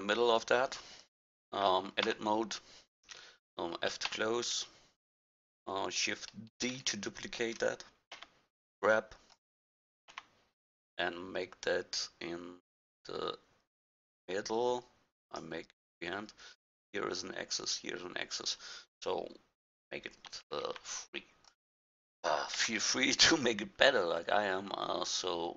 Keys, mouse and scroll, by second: 2.0 Tab, 4.1 f, 6.6 shift+d, 10.1 g, 20.3 shift+d, 22.6 g.